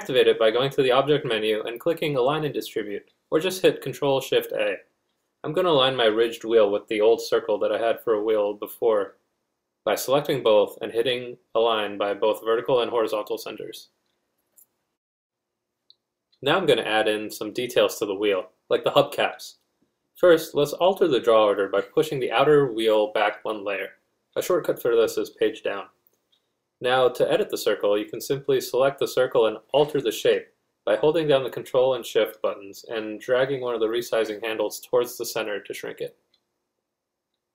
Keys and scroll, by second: 2.8 z, 3.0 z.